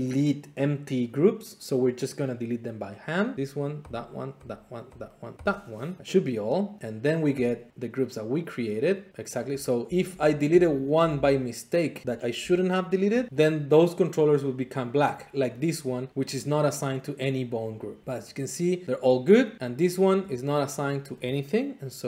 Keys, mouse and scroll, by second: 8.8 click, 9.1 middle click, 9.1-10.0 scroll, 10.0-11.1 typing, 12.0-12.4 scroll, 13.0 shift+middle click, 13.3 middle click, 15.3 click, 15.5 click, 18.0 middle click, 19.0 middle click, 19.8 click, 21.0 middle click.